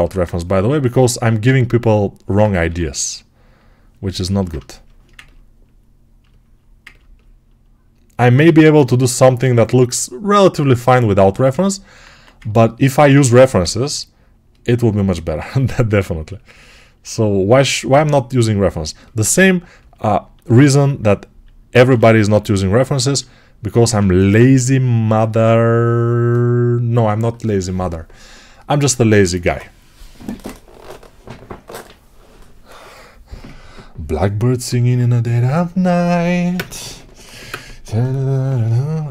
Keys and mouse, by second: 2.5 g, 12.0 1, 13.0 alt+q, 15.3 2, 22.9 alt+q.